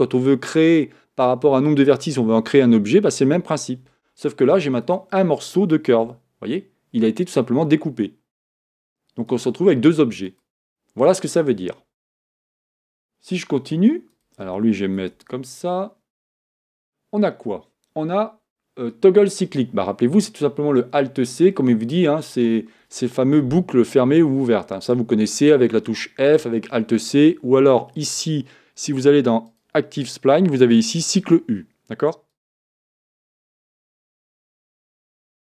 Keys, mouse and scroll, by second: 4.9 click, 6.1 g, 9.3 click, 10.3 click, 14.1 click, 15.2 Tab, 16.4-19.4 drag, 29.5 click, 31.2 click, 32.3 click.